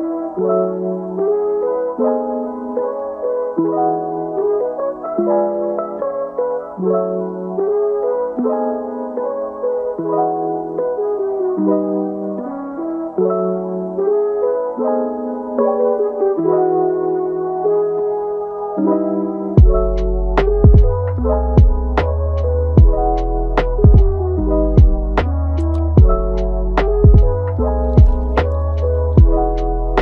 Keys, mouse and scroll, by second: 0.5 scroll up 1, 0.9 g, 2.9 scroll down 1, 3.2-4.8 middle drag, 4.8 scroll up 2, 5.0 middle click, 5.7 KP_1, 6.6 Tab, 7.3 Tab, 8.0 g, 10.3-11.3 middle drag, 11.3 g, 12.1 g, 13.3-13.7 scroll down 4, 13.7 g, 15.0 g, 18.0 Tab, 18.3 g, 20.2 click, 20.7 g, 24.8-25.2 scroll down 1, 25.2-25.6 middle drag, 25.6 Tab, 26.0 Tab, 26.5-26.9 scroll up 1, 26.9-27.8 middle drag, 27.8 scroll up 4, 28.0-28.5 middle drag, 28.5-28.8 scroll down 1, 28.8-30.0 middle drag.